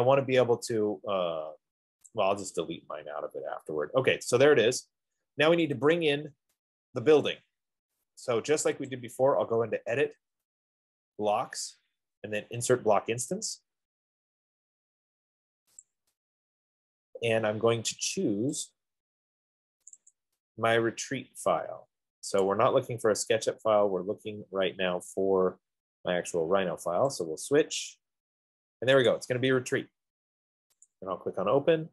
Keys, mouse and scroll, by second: 2.5 click, 4.1 middle click, 9.4 click, 13.9 click, 16.2 click, 19.1 click, 20.1 click, 20.4 click, 22.7 click, 26.2 middle click, 26.3 middle click, 27.6 click, 29.4 click, 31.3 click.